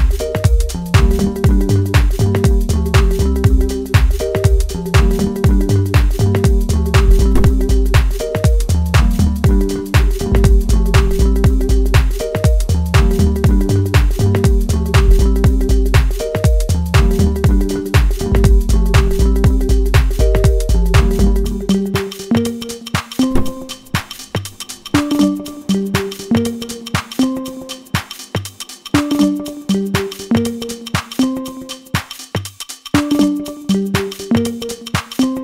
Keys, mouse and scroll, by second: 0.8-1.6 scroll up 1, 1.9-4.6 middle drag, 4.6 right click, 6.0-7.2 middle drag, 7.2 scroll up 1, 7.8 scroll down 1, 8.1 middle click, 8.8 click, 9.5-12.7 middle drag, 13.7-15.7 drag, 15.7-17.0 right drag, 17.0-23.9 drag, 23.9-25.8 middle drag, 25.8 ctrl+click, 28.7 shift+d, 30.9 click, 31.5-35.4 middle drag.